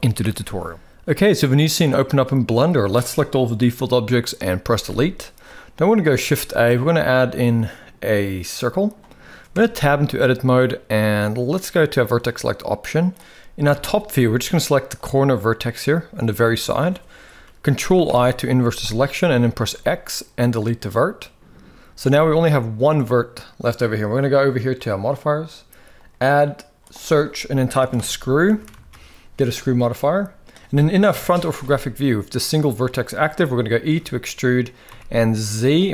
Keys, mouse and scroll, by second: 0.1 shift+middle click, 1.4-2.6 drag, 4.5 Delete, 5.8 shift+a, 9.3 Tab, 11.6 click, 13.3 KP_7, 14.6 click, 17.7 ctrl+i, 19.3 x, 22.0 middle click, 22.0 a, 25.8-29.4 drag, 30.8 KP_1, 31.5 shift+middle click, 33.8 e, 35.7 shift+middle click.